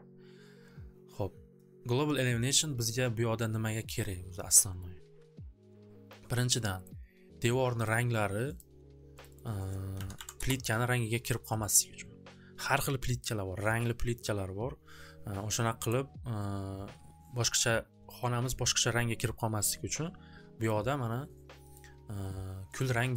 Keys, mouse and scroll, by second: 4.8 click, 6.9 click, 7.9 click, 8.7 click, 9.3 click, 9.4 click, 9.9-10.3 typing, 10.3 Return, 11.6 click, 20.7 click, 21.9 click, 22.7 click, 23.1 click.